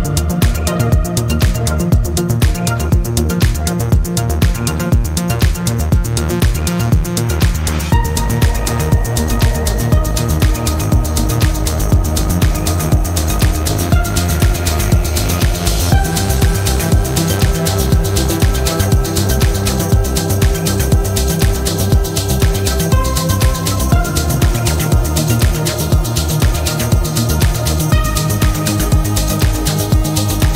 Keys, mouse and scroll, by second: 0.8 click, 4.5 click, 5.9 click, 7.3-8.7 typing, 10.0 click, 11.1 0, 12.3 click, 15.8 click, 18.6 click, 20.1 click, 21.6 click, 22.9 click, 24.3 v, 25.3 click, 26.1-27.8 typing, 28.5 click, 29.3 click.